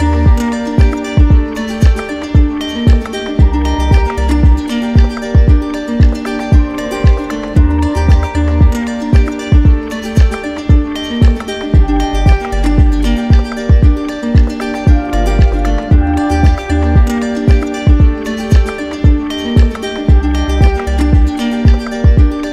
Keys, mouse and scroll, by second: 1.0 click, 2.4 click, 3.8 right click, 5.4 click, 6.3 click, 7.4 alt+right click, 8.6 click, 9.8 click, 10.7 right click, 11.6 alt+right click, 12.6 alt+right click, 15.9 click, 16.7 right click, 17.2 shift+right click, 18.4 right click, 18.8 shift+right click, 19.7 alt+right click, 21.2 shift+right click, 21.9 alt+right click.